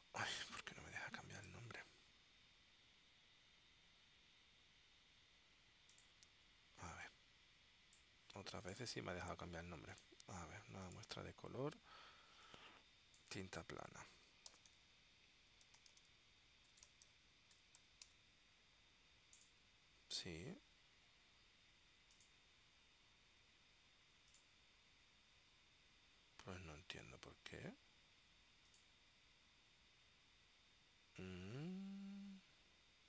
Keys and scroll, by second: 14.4-17.9 typing, 18.2 Tab.